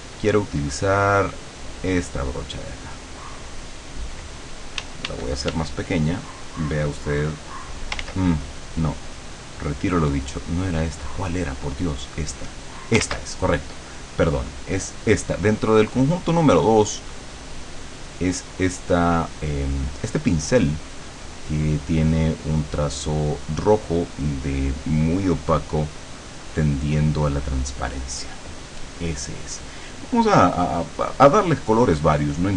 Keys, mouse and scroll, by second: 2.8 click, 4.8 d, 6.5 click, 8.0 ctrl+z, 9.2 click, 11.7 click, 12.2 click, 13.1 ctrl+z, 14.7 click, 27.3 click, 30.1 click.